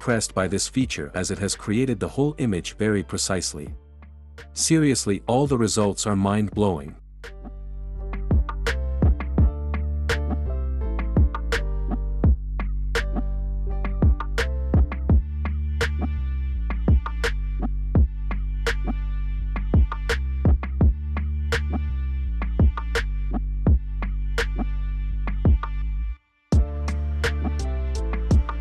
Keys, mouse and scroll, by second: 0.3 click, 4.2 click, 11.9 Escape, 14.0 click, 16.3 click, 22.5 Escape.